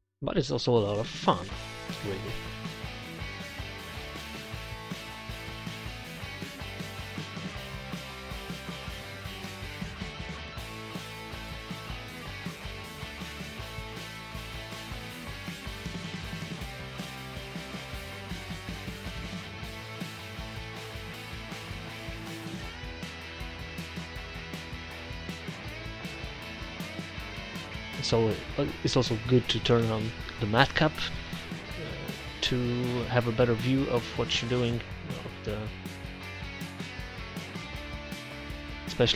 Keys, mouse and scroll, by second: 0.6 ctrl+z, 1.3 ctrl+z, 1.5-2.5 drag, 2.5 middle click, 3.3 click, 3.7 middle click, 3.8 click, 4.4 middle click, 6.0-7.2 middle drag, 7.7 middle click, 8.4-9.5 drag, 9.7 click, 11.1 middle click, 11.4 z, 11.6 z, 11.9 click, 13.0 click, 13.7 ctrl+z, 14.7 ctrl+z, 15.8 1, 18.7-22.5 drag, 22.6-27.3 drag, 28.1 middle click, 30.2-31.3 middle drag, 31.4-32.5 middle drag, 32.5 click, 33.6 ctrl+z, 33.7 ctrl+z, 34.7 click, 36.6 click, 37.8 click, 38.0 ctrl+z, 38.2 ctrl+z, 38.4 ctrl+z, 39.0 ctrl+z.